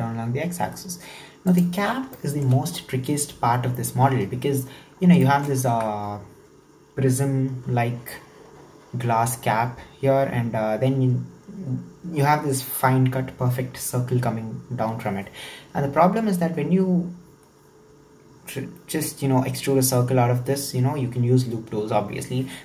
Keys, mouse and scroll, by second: 1.9 scroll down 2, 2.2-5.2 shift+middle drag, 5.3 shift+middle click, 5.7 Tab.